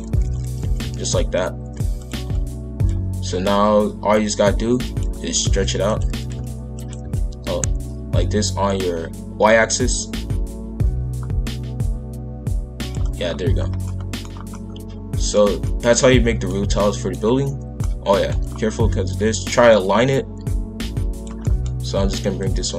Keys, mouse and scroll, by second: 0.1 shift+f, 2.8 click, 5.3 s, 6.0 s, 13.2 scroll down 1, 13.5 scroll up 2, 13.8 middle click, 14.3 scroll down 1, 14.5-18.5 middle drag, 18.5-18.9 scroll up 1, 19.7 click, 21.3-22.0 scroll up 1, 22.4 click.